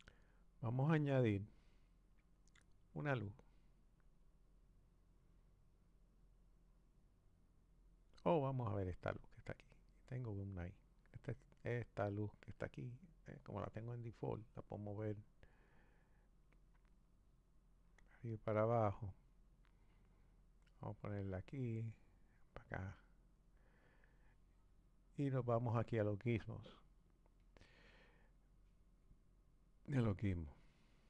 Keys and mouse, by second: 4.2-7.3 drag, 9.6 click, 12.9 click, 15.2-15.8 drag, 16.5 click, 17.5 click, 20.5 click, 22.4 click, 26.4-29.5 drag.